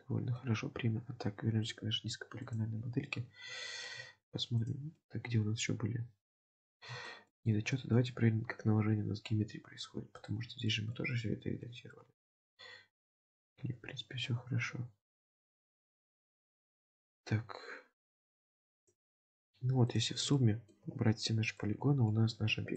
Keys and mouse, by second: 1.6 click, 2.5 click, 3.7 shift+middle drag, 5.0-6.4 middle drag, 7.0 shift+middle click, 7.8 shift+middle drag, 10.1 click, 10.7 shift+middle drag, 11.1 middle click, 12.0 shift+middle drag, 16.1 Tab, 18.2 click, 18.8 click, 19.9 click, 20.4 shift+middle click, 21.6-22.1 middle drag.